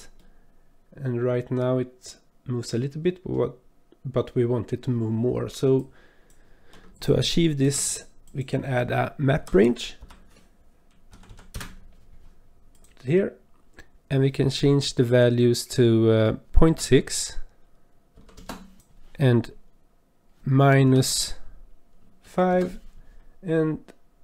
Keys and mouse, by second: 0.2-3.3 drag, 5.8 click, 6.9 click, 7.6 shift+a, 11.3 Down, 16.4-18.4 drag, 18.7-22.5 drag.